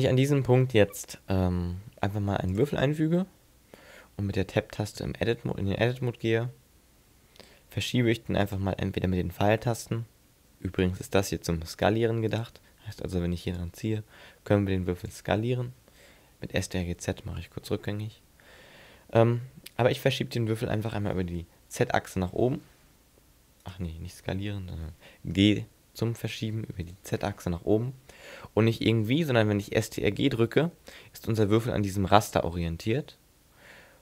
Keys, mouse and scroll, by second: 0.6 shift+a, 5.0 Tab, 5.7-6.6 scroll down 4, 8.5 click, 12.3 click, 13.6 click, 16.9 ctrl+z, 20.8 s, 23.7 right click, 25.4 g.